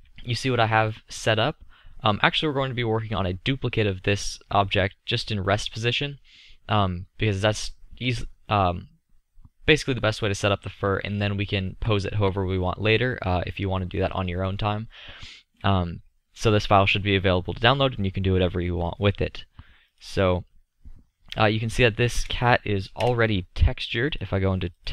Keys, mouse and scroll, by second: 7.4-14.5 middle drag, 18.0-19.9 middle drag, 21.4 click, 23.1 KP_0.